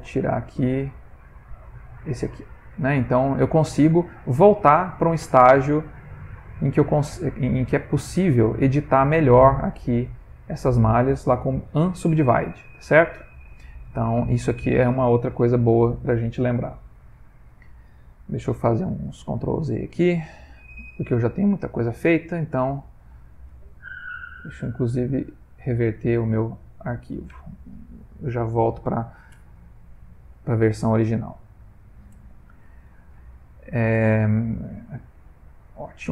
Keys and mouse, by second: 1.8 click, 2.5 middle click, 2.6 middle click, 3.8 Tab, 4.2 middle click, 6.1 ctrl+middle click, 6.6 middle click, 9.6 middle click, 13.0 Tab, 13.7 middle click, 13.9 middle click, 15.2 middle click, 16.3 middle click, 24.3 click.